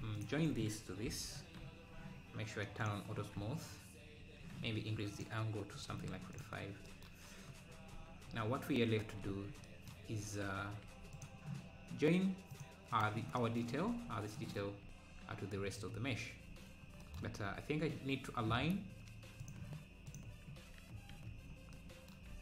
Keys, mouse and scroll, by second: 0.2 shift+click, 1.1 ctrl+j, 2.8 click, 7.9 Tab, 10.3 Tab, 11.2 click, 13.4 click, 15.3 scroll, 15.4 scroll down 1, 18.2 alt+scroll, 19.4 click, 21.5 scroll up 3.